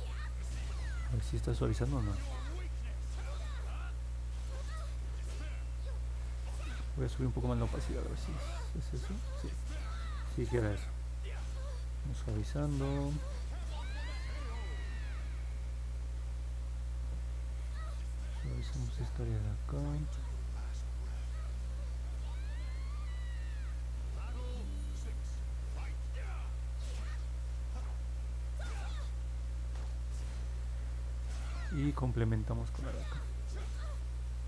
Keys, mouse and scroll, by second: 8.6-9.6 drag, 10.1 ctrl+z, 12.1 click, 12.7 click, 13.2 click, 13.7 click, 14.1 click, 14.4 click, 14.8 click, 15.4 click, 15.7 click, 16.2 click, 16.4 click, 16.7 click, 19.1 click, 19.9 click, 20.3 click, 20.7 click, 21.1 click, 21.8 click, 22.4 click, 24.2 click, 24.8 click, 25.4 click, 26.2 click, 26.6 click, 27.7 click, 29.0 click, 29.4 click, 29.7 click, 30.0 click, 30.2 click, 30.6 click, 30.9 click, 31.3 click, 31.7 click, 32.1 click, 32.5 click, 32.9 click, 33.2 click, 33.5 click.